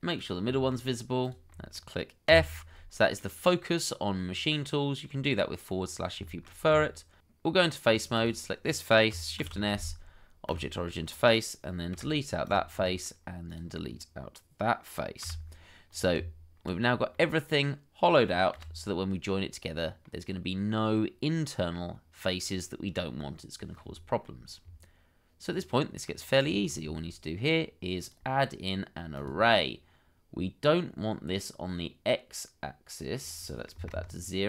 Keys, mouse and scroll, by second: 0.5 shift+middle click, 2.3 f, 2.9 middle click, 5.7-6.2 scroll up 1, 6.3 shift+middle click, 6.7 Tab, 7.5 middle click, 8.8 double click, 9.7 shift+s, 11.9 Delete, 12.8 middle click, 15.2 x, 16.2 Tab, 16.8-17.1 scroll down 1, 17.1 middle click, 18.5 /, 19.4 middle click, 23.0 middle click, 24.0 shift+middle click, 26.0-26.7 scroll up 1, 26.8 shift+middle click, 33.7 0, 33.9 Return.